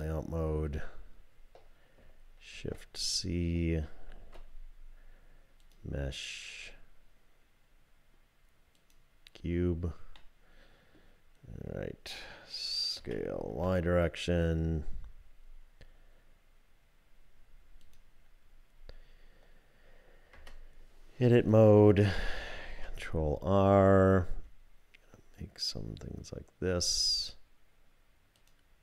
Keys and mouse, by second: 0.0 click, 2.5 shift+c, 4.5 shift+a, 10.1 click, 13.0 s, 20.3 Tab, 22.6 ctrl+r.